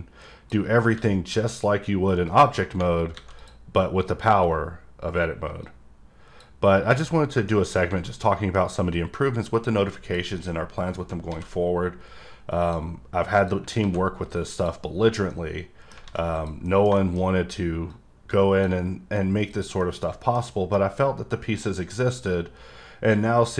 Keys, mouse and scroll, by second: 2.3 click, 3.4 click, 5.6 click, 6.9 click, 7.2 scroll down 1, 7.5 middle click, 7.7-8.1 scroll up 2, 8.1 middle click, 10.0 click, 10.4 middle click, 12.6 click, 13.4 click, 14.5 click, 14.9-15.3 scroll down 1, 15.6 middle click, 16.3 click, 16.7 middle click, 17.0 double middle click, 17.3-17.9 scroll up 2, 17.9 click, 19.5 click, 19.8 middle click, 20.2 double middle click, 20.4 middle click, 20.9-21.8 scroll up 2, 21.8 click.